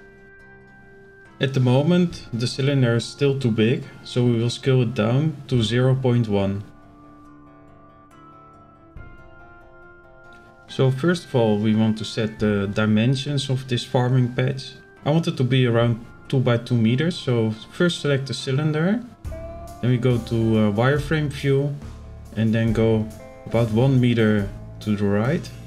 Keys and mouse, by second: 1.0 middle click, 3.6-3.9 shift+middle drag, 4.6 s, 8.8 KP_Decimal, 11.4 click, 13.8 right click, 14.2 click, 14.8 click, 15.3 click, 16.1-16.6 drag, 17.3 KP_7, 18.6 z, 19.5-19.8 shift+middle drag, 20.6-22.3 drag, 22.8-23.1 shift+middle drag.